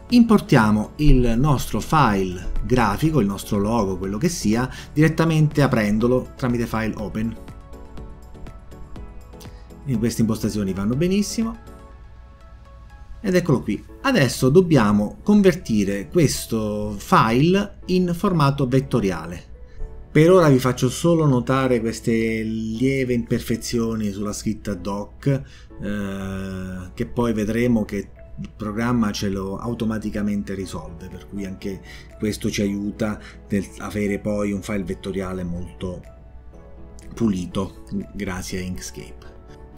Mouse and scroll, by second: 4.7 click, 6.9 click, 8.7 click, 8.9 click, 12.4 click, 12.6 click, 13.4 click, 13.6 click.